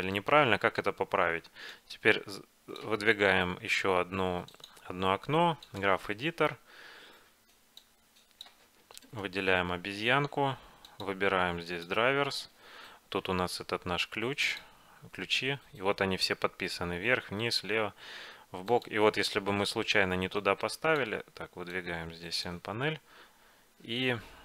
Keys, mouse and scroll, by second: 1.8-4.5 drag, 4.6-6.4 drag, 7.9-10.0 drag, 9.2-11.1 right drag, 11.1-12.9 drag, 14.6-16.5 drag, 18.8-23.0 drag, 23.0-24.4 middle drag.